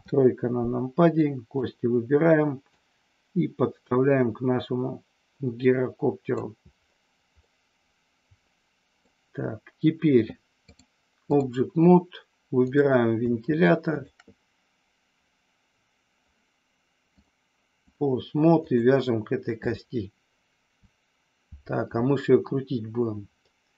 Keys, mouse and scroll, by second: 1.2 click, 2.8-6.4 drag, 7.4 scroll up 1, 7.5-9.0 middle drag, 10.9 click, 12.5 click, 17.2 click, 18.6 click, 23.5 middle click.